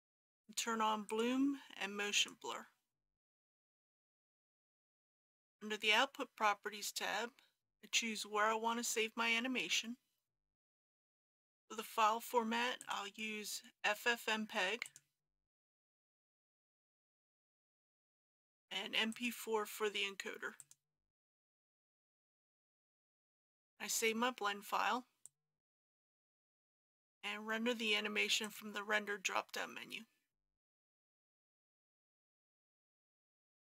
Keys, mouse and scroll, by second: 1.1 click, 11.0-12.8 scroll down 1, 12.8 click, 17.3 scroll down 1, 19.1-31.8 drag, 32.5-33.2 scroll down 1.